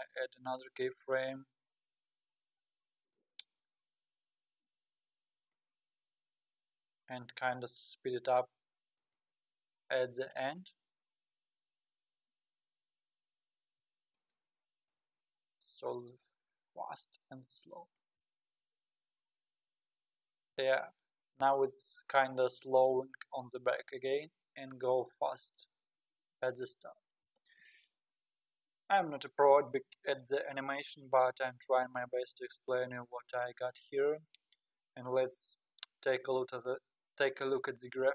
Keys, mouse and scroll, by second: 1.1-4.2 drag, 10.0-12.4 drag, 12.4 g, 14.9-18.0 drag, 18.3 space, 20.6 space, 21.0-24.0 drag, 25.7 space, 27.3 space, 32.8-35.6 drag, 37.4 click.